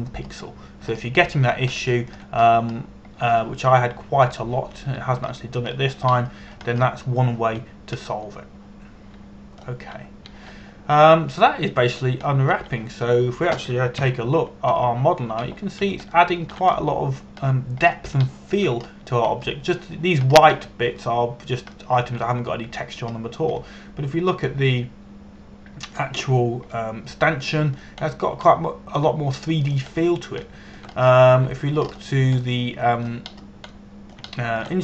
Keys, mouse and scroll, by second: 2.2 scroll up 1, 3.4 shift+middle click, 4.3-4.8 scroll up 1, 4.8-5.9 scroll down 1, 5.9 click, 6.4 a, 6.9 a, 7.4 scroll down 1, 7.6 scroll up 1, 7.8-8.5 scroll down 1, 12.4-13.8 scroll down 1, 14.0 shift+middle click, 15.6 ctrl+KP_1, 16.4 scroll down 1, 17.0 a, 17.8 shift+middle click, 18.4 middle click, 19.1-19.6 scroll up 1, 19.9 shift+middle click, 20.4 scroll up 1, 20.9 scroll down 1, 22.0 scroll up 1, 23.4 shift+middle click, 24.8-25.2 scroll up 1, 25.2 middle click, 27.6 scroll up 1, 27.9 scroll down 1, 28.4 middle click, 29.8-30.1 scroll down 1, 30.1 middle click, 32.1 shift+middle click, 32.7 scroll up 1, 33.0 Tab, 33.5 scroll up 1, 34.1 middle click.